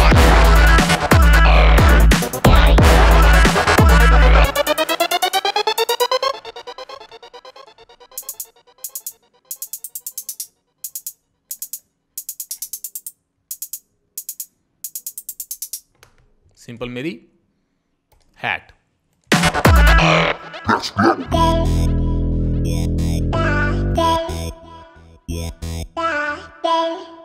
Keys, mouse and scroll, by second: 17.7 click.